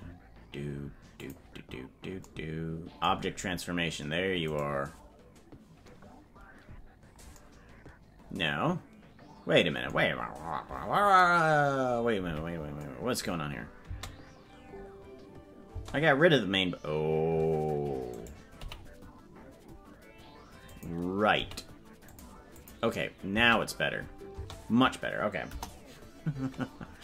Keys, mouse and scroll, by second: 1.3 click, 4.5-6.8 right drag, 12.2 KP_Decimal, 13.8 space, 15.8 space, 18.1 right click, 18.6 g, 22.6 click, 23.3 space, 24.4 space, 25.4 KP_0.